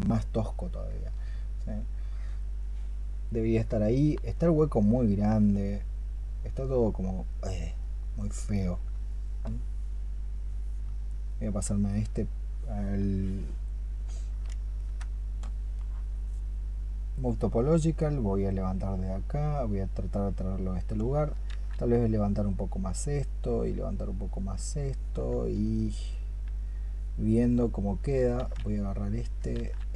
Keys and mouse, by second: 8.9 alt+click, 14.6 ctrl+click, 21.3 ctrl+z, 28.2 ctrl+z.